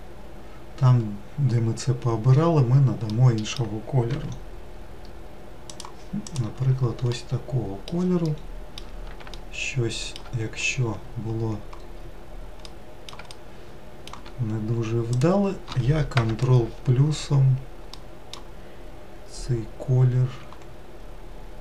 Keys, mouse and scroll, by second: 3.8 scroll up 5, 3.9 g, 6.1 click, 6.9-10.3 middle drag, 10.3-11.7 scroll up 2, 12.4-14.9 middle drag, 14.9 click, 15.8 ctrl+KP_Add, 20.1 g.